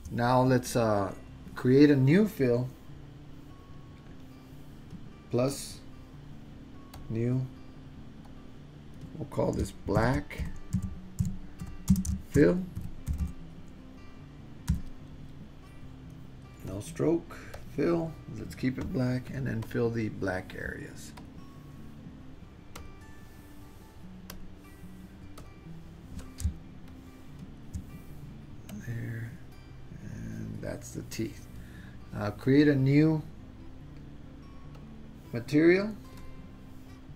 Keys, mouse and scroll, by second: 5.7 click, 7.0-7.4 drag, 8.3-16.3 drag, 13.2 l, 16.7 drag, 17.6 click, 19.8 click, 21.2 click, 22.8 click, 24.3 click, 25.4 click, 26.3 super+z, 26.9 shift+click, 28.7 click, 34.9 click, 36.4 click.